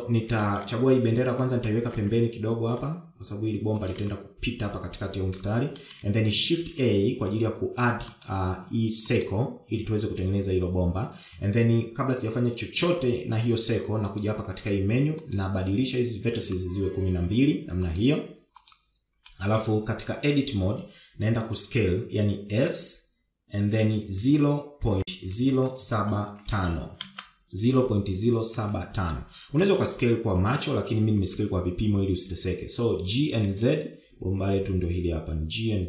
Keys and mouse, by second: 0.6 shift+middle click, 1.3 shift+middle click, 2.5 g, 6.7 shift+middle click, 7.4 shift+a, 15.0 click, 16.1-18.9 drag, 19.6 click, 20.2 middle click, 20.9 Tab, 23.4 s, 29.5 KP_1, 30.8 shift+middle click, 32.2 e.